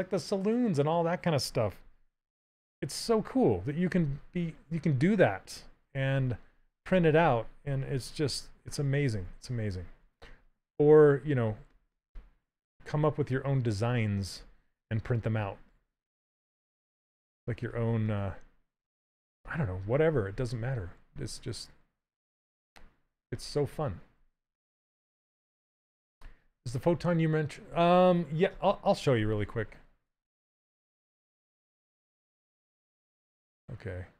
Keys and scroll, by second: 9.9 s, 15.4 s.